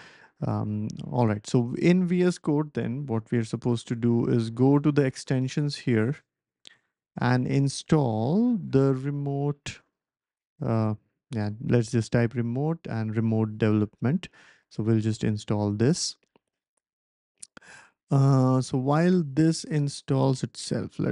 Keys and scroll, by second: 3.1 ctrl+alt+super+p, 8.0-11.0 typing, 20.8-21.1 typing.